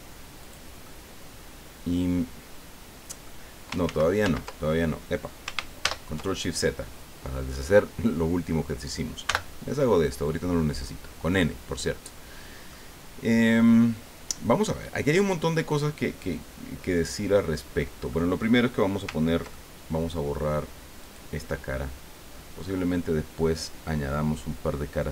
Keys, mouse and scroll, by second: 0.4 click, 0.8-3.4 middle drag, 3.8 ctrl+z, 5.8 ctrl+shift+z, 9.2 n, 10.4-11.5 drag, 11.9-12.2 scroll up 2, 12.3 scroll down 2, 12.7-17.9 drag, 18.1 click, 19.5 ctrl+click, 21.0 right click.